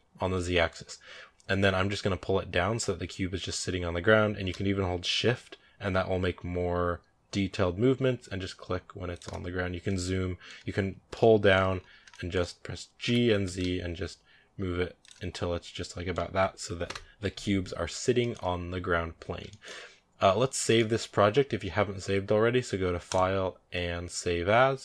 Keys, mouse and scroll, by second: 9.5 scroll down 3, 9.7-11.6 middle drag, 11.6-11.9 scroll up 4, 11.9 shift+middle click, 12.9 g, 15.4 scroll down 2, 15.6-16.7 middle drag, 16.7 KP_0, 17.5 scroll up 3, 17.5 scroll down 2, 18.0 shift+middle click, 18.6 scroll down 2, 19.3 shift+middle drag, 19.5-20.5 scroll down 1, 20.5-20.8 shift+middle drag, 20.8-22.7 scroll up 1.